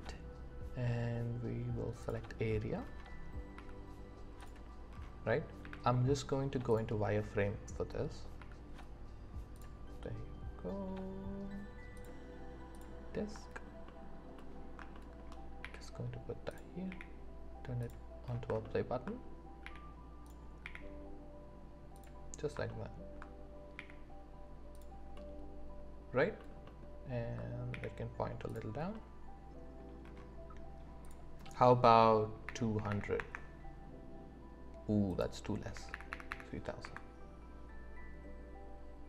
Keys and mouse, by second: 26.1-27.4 alt+drag.